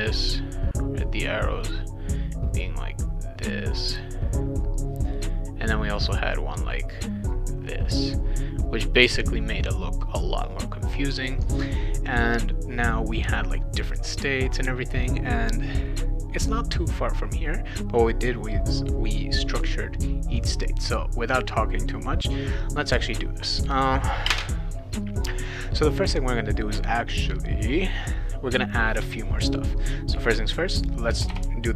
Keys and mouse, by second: 0.5 click, 1.6 click, 2.3 click, 3.2 click, 4.1 click, 5.1 click, 5.9 click, 6.9 click, 7.6 click, 8.6 click, 20.9 click, 22.6 click, 29.4 click, 30.8 click, 31.1 BackSpace.